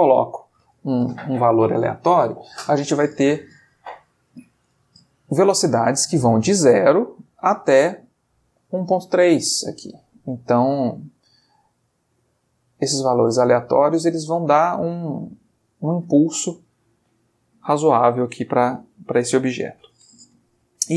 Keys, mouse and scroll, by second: 9.8-14.7 drag.